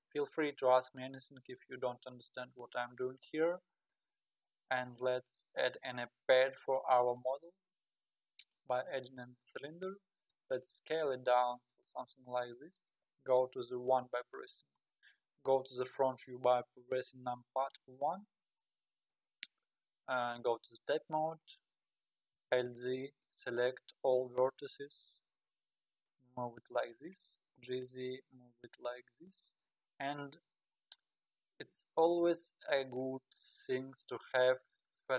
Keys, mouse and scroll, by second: 5.8 shift+a, 9.9 s, 13.7 KP_1, 17.9-20.1 scroll down 10, 20.5 Tab, 21.2 click, 21.8-22.5 scroll down 1, 22.5 alt+z, 23.0 click, 24.2 g, 26.9 click, 27.5 g, 30.0-31.0 scroll down 7, 31.1 scroll down 4, 33.0-33.8 scroll down 9, 34.3-34.7 scroll down 5, 35.0 g.